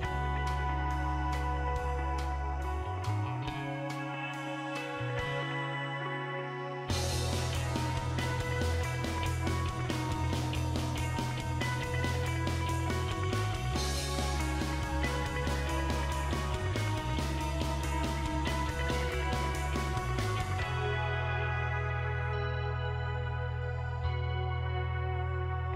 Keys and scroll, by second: 6.4 m, 11.9 Left, 12.1 Left, 13.1 BackSpace, 13.7 4, 14.3 BackSpace, 17.6 1.